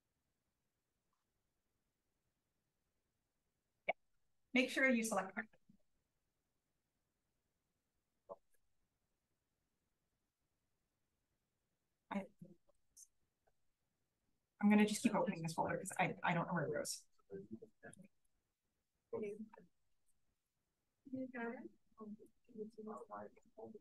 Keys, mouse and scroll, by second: 6.8 click, 14.6 right click, 15.8 click.